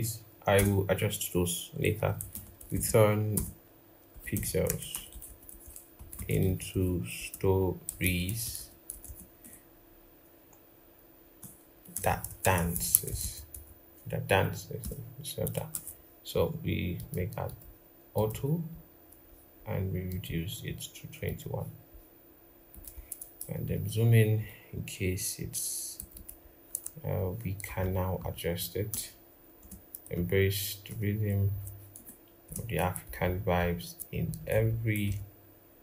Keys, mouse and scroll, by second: 0.0-0.3 typing, 2.0-6.2 typing, 11.2 Return, 11.7-13.3 typing, 14.6 typing, 23.2 ctrl+=, 25.9 double click, 27.4 ctrl+Left, 27.6 ctrl+Left, 28.7 BackSpace, 29.3 space, 29.9 ctrl+Right, 30.6 Return, 31.2 Down, 31.7 BackSpace, 32.2 space, 32.8 ctrl+Right, 33.0 ctrl+Right, 34.0 Right, 34.1 Right, 34.4 Right, 34.8 Right, 35.6 Return.